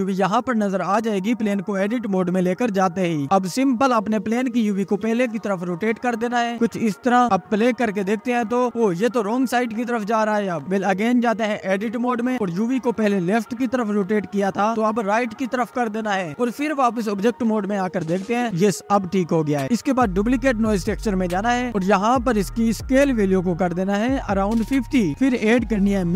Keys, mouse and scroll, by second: 7.6 Tab, 8.4-11.0 drag, 11.0 space, 11.4 Tab, 12.9 r, 18.5 space, 19.7-20.6 scroll up 2, 20.6 click, 21.7-24.7 drag, 25.8 shift+a.